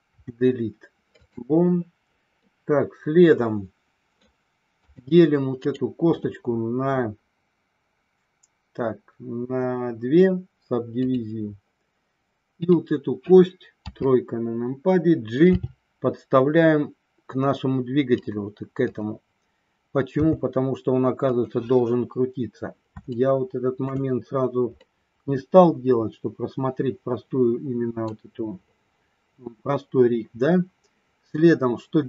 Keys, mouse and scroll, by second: 0.0 Delete, 2.4-4.2 middle drag, 4.8 click, 5.6-11.1 right drag, 12.5 click, 13.8 KP_3, 15.5 g, 18.1 click, 20.1 g, 21.2 click, 23.1 shift+middle click, 24.8-28.0 middle drag, 28.8-32.0 middle drag.